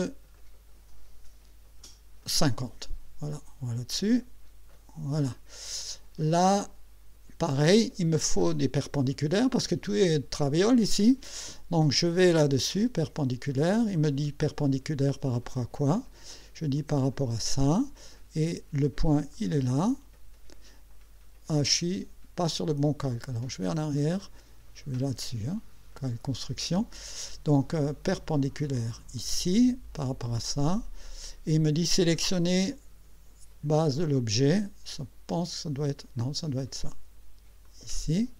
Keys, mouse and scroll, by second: 0.3 click, 1.8 KP_5, 2.3 KP_0, 4.7 click, 13.4 click, 16.8 click, 19.3 click, 23.7 click, 25.0 click, 29.2 click, 37.6 click.